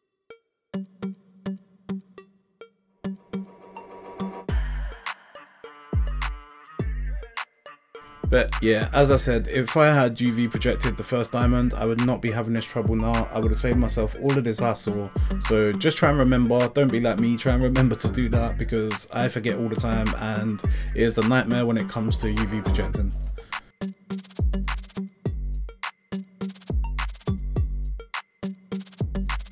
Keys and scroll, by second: 0.0-5.0 typing, 6.1 g, 6.4 g, 6.9 g, 8.3 Tab, 8.7 a, 9.8 Tab, 11.4 Tab, 11.5-13.9 typing, 15.7 Tab, 16.0 Tab, 16.1 a, 16.7 u, 17.7-20.2 typing, 21.3 u, 22.4-26.0 typing, 27.7-29.5 typing.